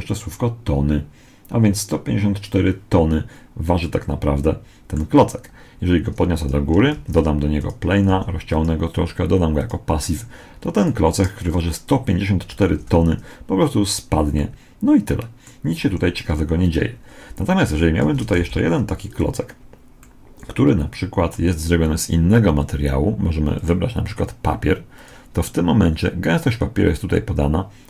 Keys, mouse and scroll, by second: 3.7-5.3 middle drag, 5.3-7.0 drag, 6.8 shift+a, 8.0 s, 9.4-11.2 drag, 11.2-12.4 right drag, 12.6 alt+a, 14.3-16.1 middle drag, 15.8 Escape, 17.9 shift+d, 19.9-23.4 middle drag, 23.4 click.